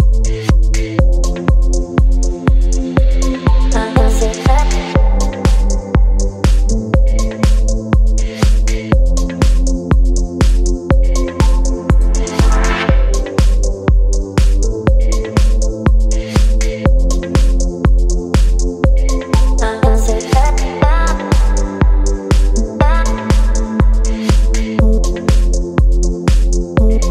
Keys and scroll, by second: 4.4 b, 7.4 x, 9.8 x, 11.6 space, 14.2 space, 19.0 v.